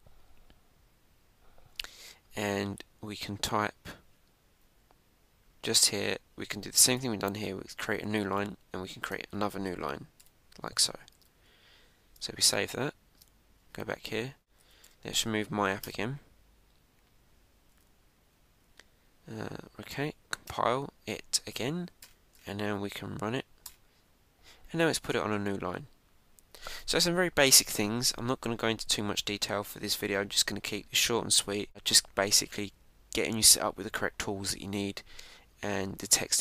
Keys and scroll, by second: 12.0 super+s, 13.5 super+Tab, 14.4 Down, 16.7 Return, 18.6 Up, 21.4 Return, 22.9 Up, 24.6 Return.